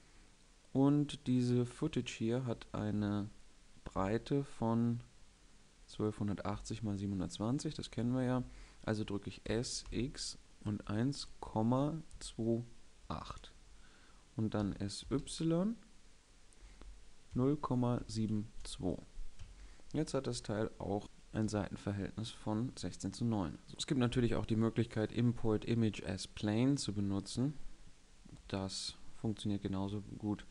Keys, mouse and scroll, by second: 9.5 s, 14.6 s, 21.4 KP_5, 22.9 middle click, 28.1 Tab, 28.9 Tab, 29.8 ctrl+a.